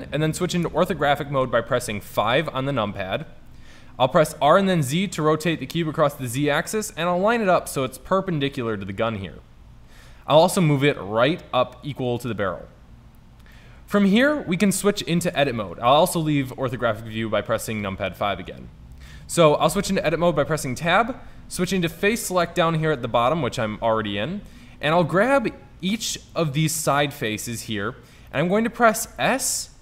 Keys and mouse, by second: 0.7 KP_5, 4.1 r, 7.9-9.8 drag, 10.0 g, 13.6 middle drag, 14.0 middle drag, 14.5 middle click, 15.4 KP_5, 19.8 Tab, 25.4-28.4 middle drag, 29.2 s.